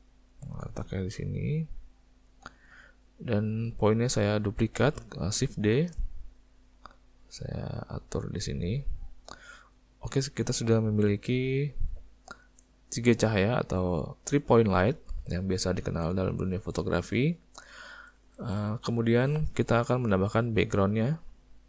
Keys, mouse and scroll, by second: 1.1 click, 2.3 click, 3.6 click, 5.4 shift+d, 9.1 middle click, 10.1 middle click, 11.9 click, 12.8 click, 15.2 middle click, 16.8 middle click, 17.5 middle click, 18.3 shift+middle click, 20.1 n.